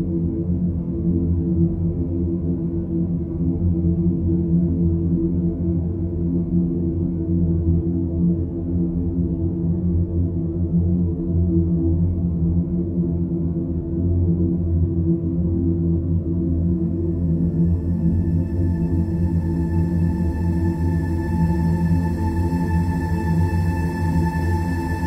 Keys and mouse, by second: 0.9 click, 1.6-5.3 middle drag, 5.8 click, 6.3 Tab, 8.3 click, 9.5 click, 11.7 click, 12.7-14.4 drag, 15.8-16.8 shift+drag, 18.1 click, 19.4 s, 20.8 s.